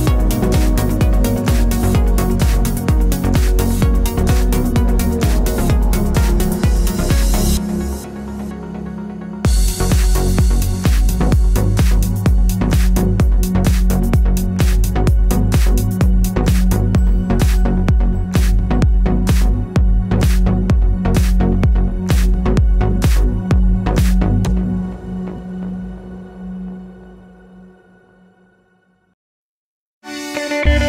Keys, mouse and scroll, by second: 0.9-2.0 middle drag, 2.0 click, 3.0 g, 4.6 click, 4.8 shift+a, 8.7-10.4 drag, 9.5 Return, 10.7 click, 12.5 click, 13.1-18.5 drag, 18.6-22.9 drag, 20.0 Return, 22.0 KP_Enter, 22.8 scroll down 1, 22.9-25.2 shift+middle drag, 23.3 scroll up 1, 25.2 drag, 25.6-27.5 drag, 27.4 scroll down 1, 27.5-28.9 middle drag, 28.9 click, 29.1 click, 29.5-30.8 drag.